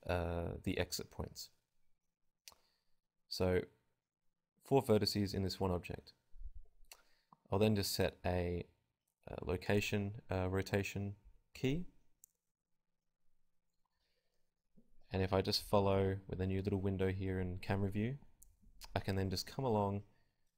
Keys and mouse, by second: 4.2-7.2 middle drag, 7.5 click, 10.1-11.2 drag, 11.2 KP_0, 11.4 KP_0, 11.6-13.3 drag, 14.0 click, 14.2 g, 15.6 click, 15.6 g, 16.9-18.5 drag, 17.0 i, 20.4 click.